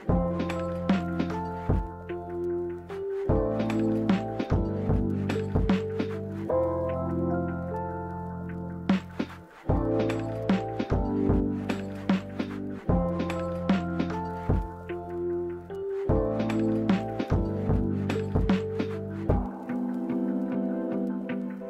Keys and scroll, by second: 6.5-7.5 typing.